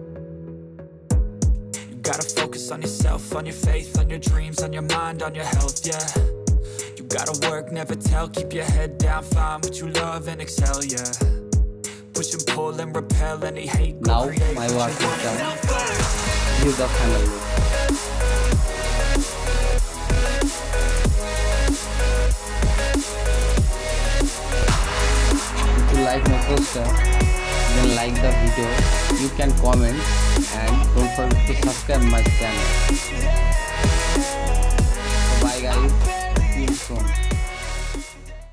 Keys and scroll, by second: 0.0-3.0 typing, 1.4 Return, 1.8 Return, 2.8 F1, 3.4 ctrl+t, 3.7 Return, 4.3 v, 5.0 F1, 6.8 1, 8.8 v, 9.1 ctrl+t, 10.5 Return, 12.3 Down, 13.5 v, 13.7 ctrl+t, 14.6 Return, 14.8 Right.